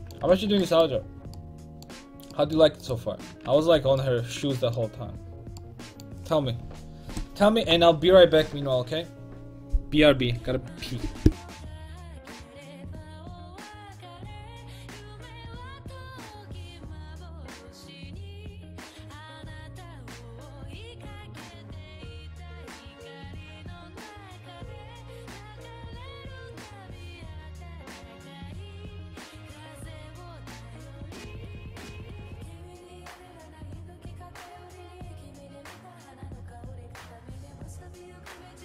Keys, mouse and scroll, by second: 0.2 Tab, 2.9-4.7 right drag, 3.7 ctrl+Tab, 3.9 h.